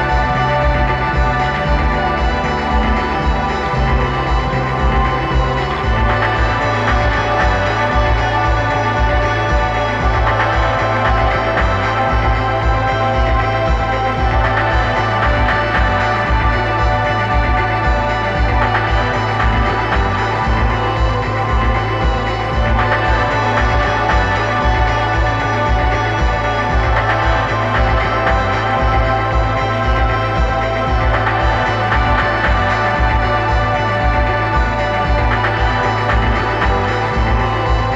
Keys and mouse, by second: 1.1-2.4 middle drag, 3.2-4.4 middle drag, 4.4-6.2 drag, 11.0 KP_1, 12.0-13.5 middle drag, 14.8-17.0 right drag, 16.2-18.0 drag, 21.6 middle click, 22.8-24.4 drag, 26.8-28.5 middle drag, 29.0 middle click, 32.4-34.1 drag.